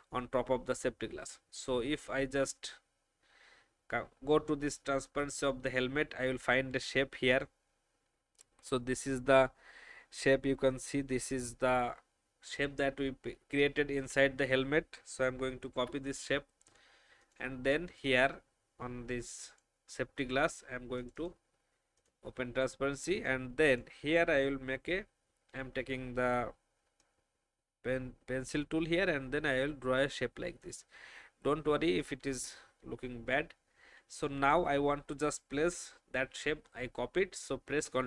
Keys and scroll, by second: 15.7 ctrl+c, 23.1 alt+space, 24.9 n, 31.4 v.